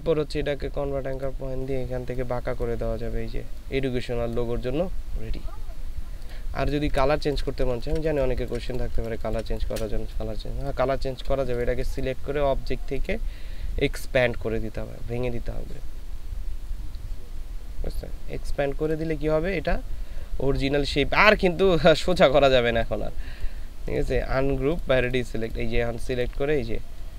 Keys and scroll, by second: 7.1 ctrl+space.